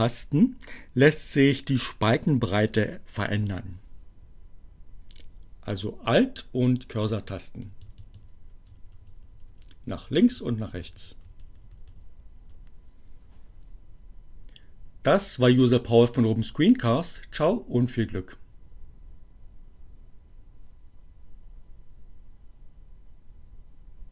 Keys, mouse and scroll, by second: 6.9 alt+Right, 8.8 alt+Left, 9.9 alt+Right, 11.3 alt+Left.